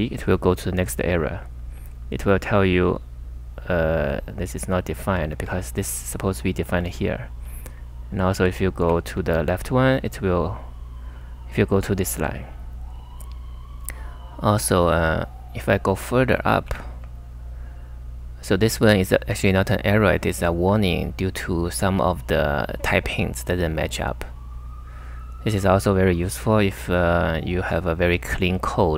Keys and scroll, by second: 0.0-0.1 typing, 1.4-2.4 typing, 3.9 j, 5.0 k, 5.2 k, 5.4 k, 6.6 typing, 8.4-9.3 typing, 16.2-17.1 typing.